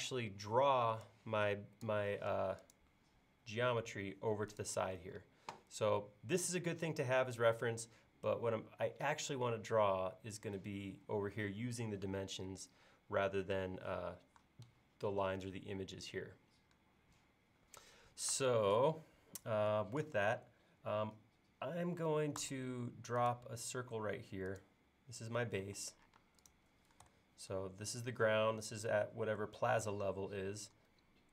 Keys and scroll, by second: 2.2 m, 5.0 space, 22.4 c, 25.6 e, 26.2 space.